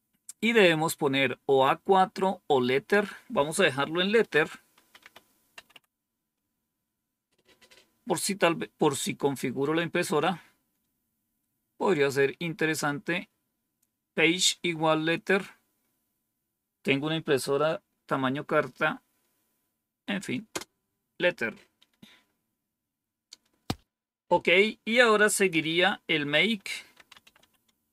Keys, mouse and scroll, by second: 3.7-6.1 typing, 20.4 Return, 25.4 Up, 26.0 Down, 26.6-27.8 typing, 27.8 Return.